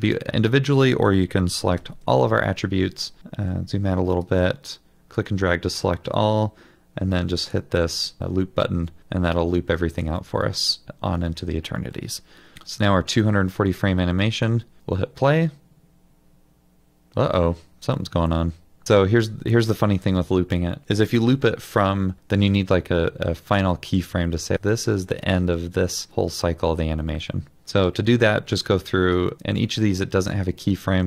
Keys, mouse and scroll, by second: 1.8 ctrl+a, 2.9 scroll down 1, 3.2 middle click, 10.3 middle click.